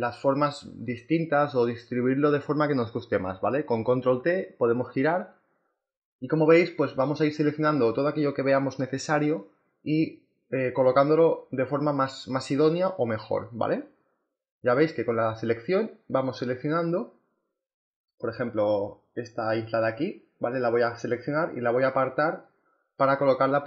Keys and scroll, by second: 10.7 Return.